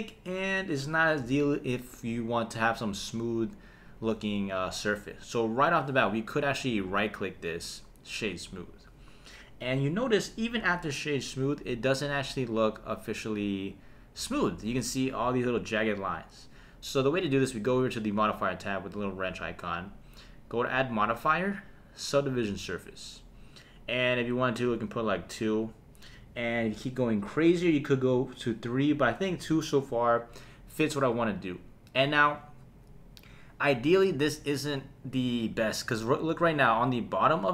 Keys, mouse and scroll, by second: 6.9 right click, 8.1 click, 19.0 click, 20.6-22.6 drag, 25.2 click.